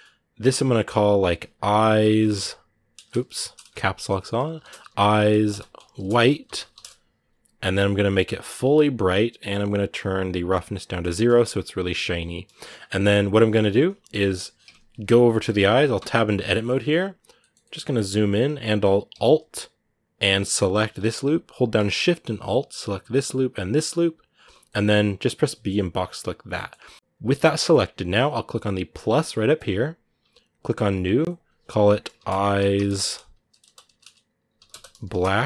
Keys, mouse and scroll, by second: 7.7 click, 8.2 click, 10.2 click, 10.9 shift+middle click, 11.0-12.0 shift+scroll up 1, 12.0-13.1 shift+scroll up 2, 12.3 shift+middle click, 13.3-14.3 scroll down 2, 15.2 shift+middle click, 15.4 scroll up 1, 16.1 shift+middle click, 17.0 scroll up 1, 17.2 shift+middle click, 17.6 scroll up 1, 17.9-20.5 middle drag, 20.5-24.4 alt+right drag, 24.4-25.9 middle drag, 25.9 b, 26.2 scroll down 2, 26.3-29.4 middle drag, 29.4-35.4 drag.